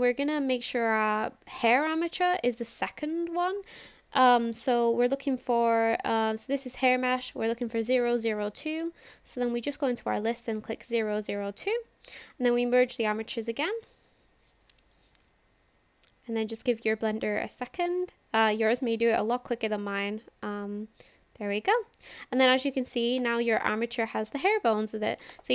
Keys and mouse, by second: 0.1 click, 5.6 click, 9.8-10.8 drag, 12.6-19.8 drag, 23.2 click, 25.4 click.